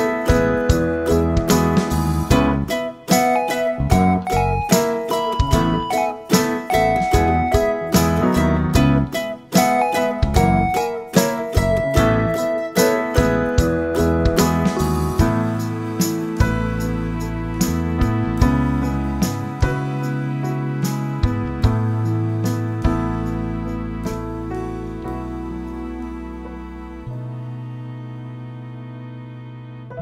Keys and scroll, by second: 0.0-3.0 typing, 2.2 Return, 8.3-9.1 typing, 16.9 5, 17.3 Return, 22.6-28.0 typing, 29.2-30.0 typing.